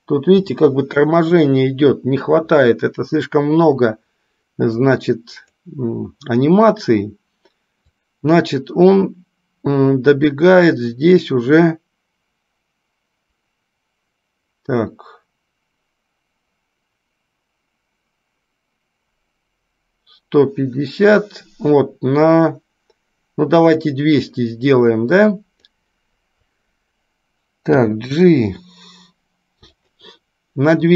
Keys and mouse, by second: 4.9-5.7 drag, 8.1-24.0 drag, 25.2-25.9 drag.